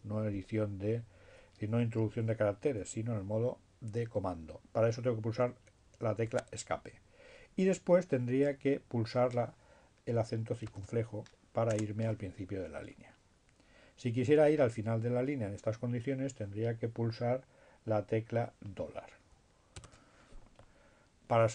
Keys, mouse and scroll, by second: 4.4 Escape, 9.2 space, 17.7 shift+4.